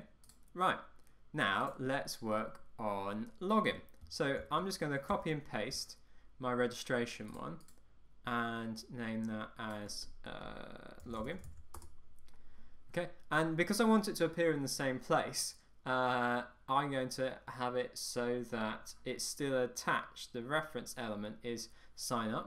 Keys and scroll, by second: 4.5 super+c, 5.2 super+v, 11.9 Return.